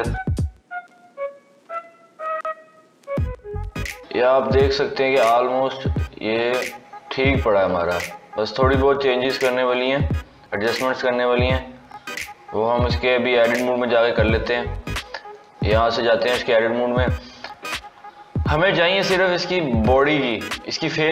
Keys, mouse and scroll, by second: 2.0 KP_3, 2.7 scroll up 3, 3.7-6.7 scroll down 1, 10.8 s, 13.7 scroll down 2, 15.2-17.4 drag, 17.4 scroll up 2.